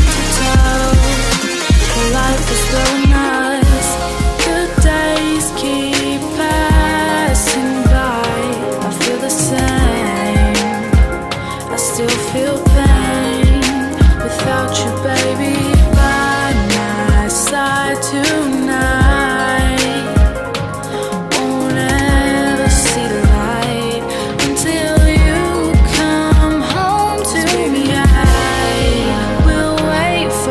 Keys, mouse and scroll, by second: 1.1 click, 2.9 BackSpace, 3.3 Return, 4.2-6.5 drag, 8.2-9.7 typing, 9.8 Return, 10.1 Tab, 10.4-11.9 drag, 11.9 right click, 12.5 click, 13.4-15.0 typing, 16.2 Down, 16.6 Return, 17.7 click, 22.2 Tab, 22.7 click, 25.1 F10, 25.4 right click, 26.7 click, 27.0-28.4 typing.